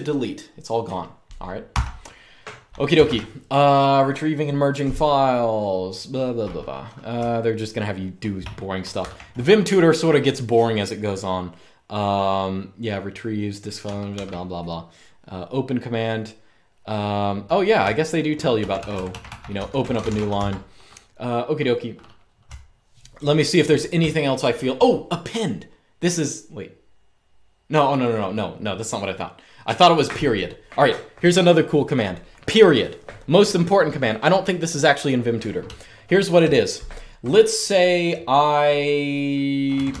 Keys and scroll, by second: 1.4-3.3 typing, 6.9-8.1 typing, 8.7 ctrl+d, 13.9 ctrl+d, 17.5-20.4 typing, 22.2-24.5 typing, 35.4-36.7 typing, 39.5-40.0 typing.